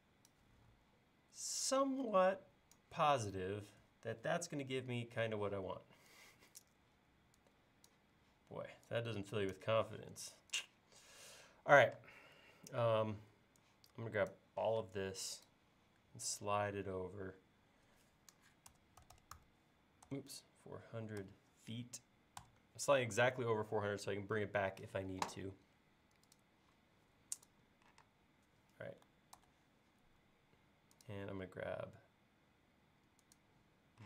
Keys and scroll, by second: 12.0 space, 14.7 m, 18.7-19.0 typing, 20.6-21.3 typing, 22.4 Return, 28.1 space, 29.4 super+s.